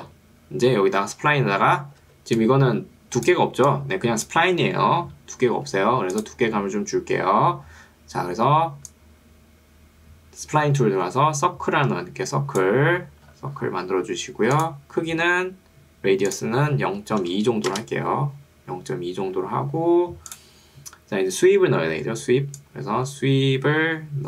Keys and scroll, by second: 2.1 ctrl+2, 5.1 Escape, 17.7 Return.